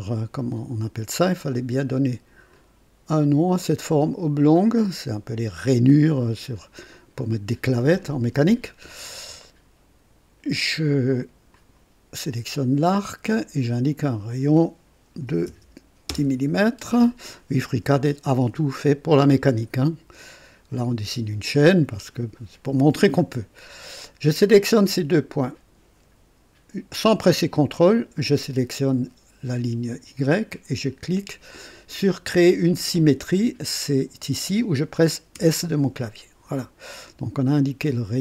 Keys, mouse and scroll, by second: 0.2 click, 2.5 click, 6.0 click, 9.4 right click, 11.5 click, 13.9 click, 15.3 KP_1, 15.5 KP_0, 16.1 Return, 16.3 Return, 19.2 click, 21.5 click, 27.9 click, 35.3 s.